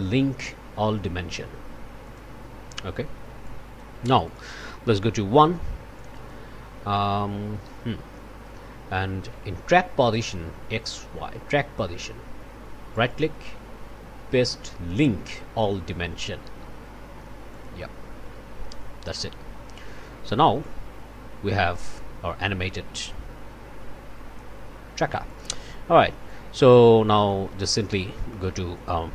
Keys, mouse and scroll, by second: 2.0 click, 3.4 click, 4.0 click, 5.3 1, 5.9 click, 13.0 right click, 17.5 click, 20.6-24.6 drag, 25.2 click, 26.2 click, 27.2 click, 27.7 click, 28.3 click, 28.7 click.